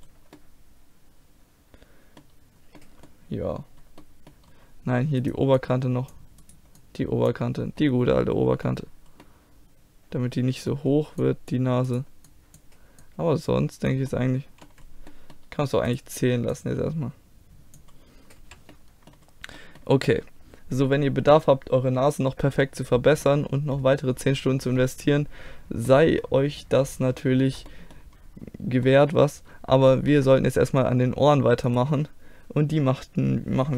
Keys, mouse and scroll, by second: 2.4 middle click, 3.0-4.5 middle drag, 5.2 right click, 5.6 middle click, 6.1-7.8 drag, 6.1-7.8 right drag, 7.8-8.9 middle drag, 9.9-11.2 middle drag, 11.2-14.1 drag, 11.9-13.8 right drag, 14.1 middle click, 14.7 click, 15.9-17.8 drag, 16.5-17.6 middle drag, 16.5-17.9 right drag, 17.9 click, 18.4 a, 22.0 middle click, 25.6 middle click, 29.5-31.7 middle drag, 31.7-33.7 drag.